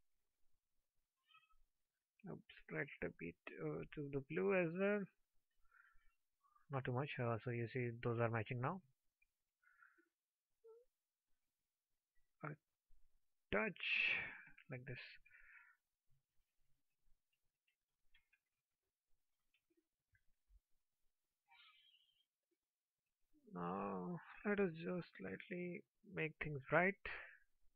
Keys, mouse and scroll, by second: 19.7 alt+middle click.